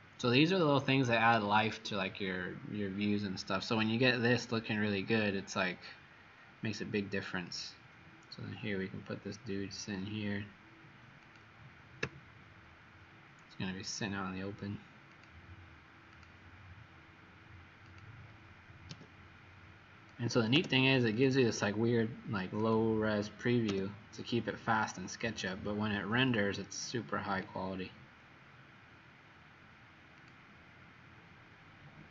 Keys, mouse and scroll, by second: 12.1 q, 15.0 click, 18.8 m, 22.8 click, 23.8 m, 30.2 click.